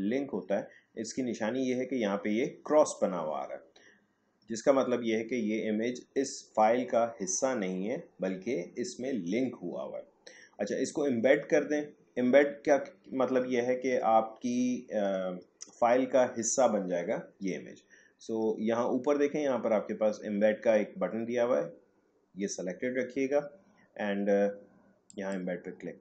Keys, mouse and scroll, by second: 25.1 click.